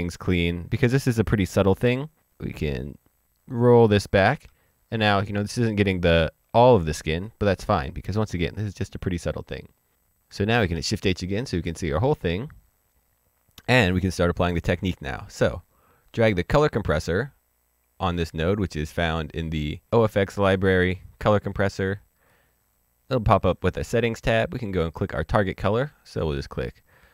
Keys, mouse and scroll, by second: 4.6-5.0 ctrl+scroll down 1, 5.3-7.9 scroll down 1, 8.4-9.0 scroll down 1, 9.0 middle click, 10.7 shift+h, 15.9 click, 19.9 click, 22.2 click, 24.6 click, 26.3 click.